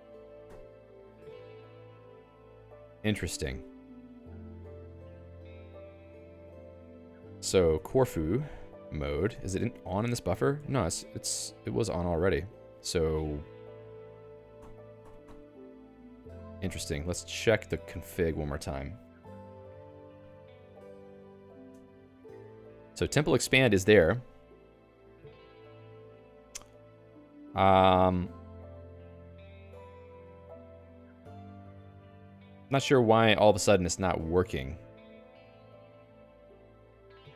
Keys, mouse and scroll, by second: 0.1 a, 4.4 o, 7.4 alt+x, 8.0 c, 9.4 ctrl+j, 9.5 Return, 10.6 alt+x, 11.2 Return, 13.6-14.5 typing, 14.5 ctrl+alt+i, 15.0 ctrl+alt+i, 15.2 ctrl+alt+i, 15.7 ctrl+g, 16.2 Escape, 16.8 ctrl+alt+j, 17.8 ctrl+j, 18.0 Return, 18.6-22.8 typing, 37.2 ctrl+alt+j.